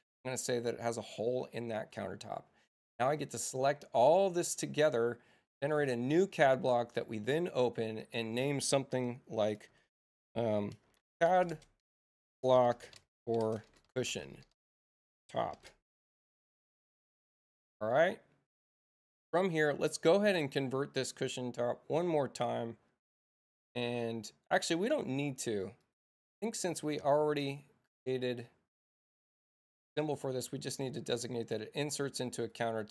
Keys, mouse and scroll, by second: 0.0 click, 1.7 click, 3.0 space, 3.7 click, 5.6 click, 7.0 click, 10.9-16.5 typing, 19.9 click, 22.4 middle click, 25.7 middle click, 26.3 click, 31.1 middle click, 32.4 click.